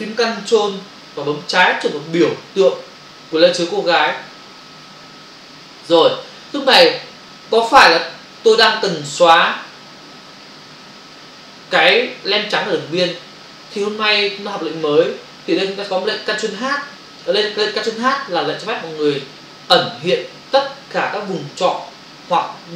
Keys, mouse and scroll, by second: 4.0 ctrl+click.